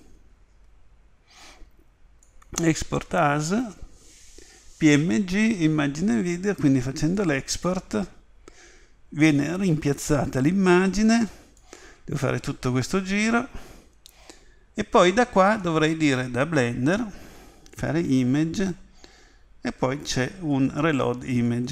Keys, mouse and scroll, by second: 17.8 click.